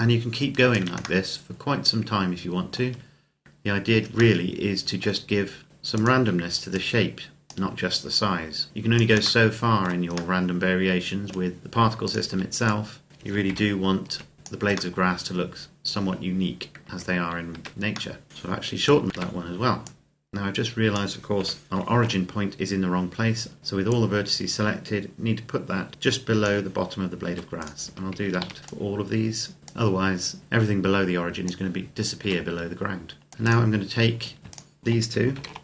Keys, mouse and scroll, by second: 1.1 middle click, 2.6 Tab, 4.3 middle click, 5.5 scroll up 1, 6.1 alt+right click, 6.5 click, 8.7 click, 9.2 shift+middle click, 11.8 alt+right click, 12.5 click, 13.3 ctrl+KP_Add, 14.3 click, 14.7 middle click, 17.4 Tab, 18.0 middle click, 18.3 click, 19.1 Tab, 19.6 click, 21.1 KP_7, 21.7 shift+middle click, 23.7 click, 27.1 Tab, 27.4 right click, 27.7 Tab, 28.0 a, 28.2 a, 28.6 click, 32.0 Tab, 33.1 click, 33.3 right click, 34.4 shift+right click, 35.1 shift+d, 35.5 click.